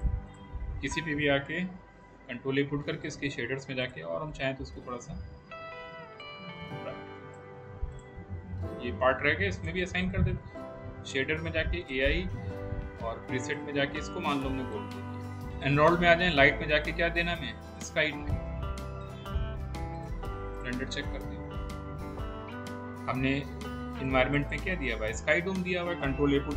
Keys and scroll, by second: 2.3 ctrl+a, 4.0 ctrl+a.